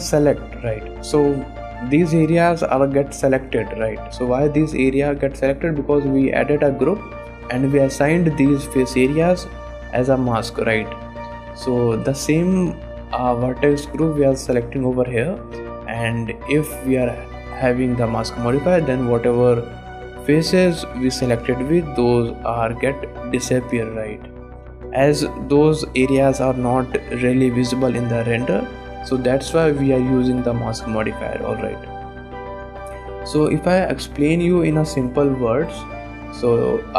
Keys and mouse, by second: 0.3 click, 1.2 click, 1.6 shift+click, 2.0 click, 2.8-5.0 drag, 6.0 click, 8.3 middle click, 11.5 click, 12.5 ctrl+Tab, 17.0 click, 18.7-19.7 middle drag, 21.9-23.5 middle drag, 24.9 click, 25.4 middle click, 26.3 middle click, 26.4 click, 28.0 shift+click, 32.3 click, 32.7 shift+click.